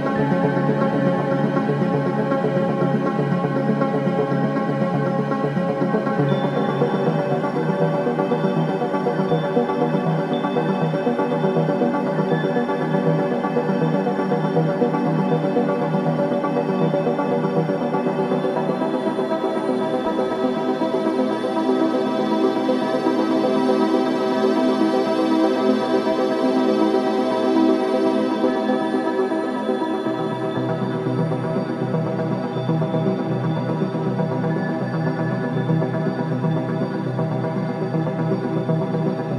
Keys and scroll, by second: 2.1 ctrl+j.